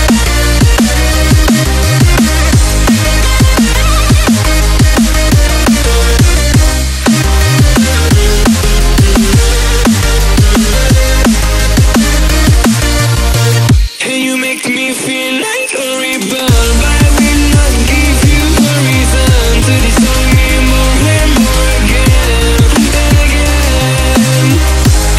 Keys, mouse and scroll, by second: 4.0 right click, 4.7-7.1 drag, 14.7 click, 17.0-17.8 drag, 21.9 ctrl+=, 22.3 space, 22.5 click, 22.6-22.9 space, 23.1-23.6 drag.